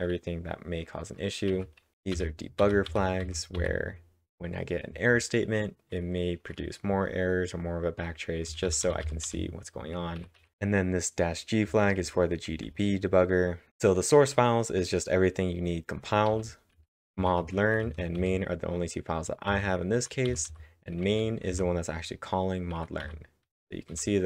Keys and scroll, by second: 1.5 typing, 3.6 typing, 4.6 typing, 8.5 typing, 10.2 typing, 11.4-12.7 typing, 16.3-18.2 typing, 20.8-21.6 typing, 23.0 w.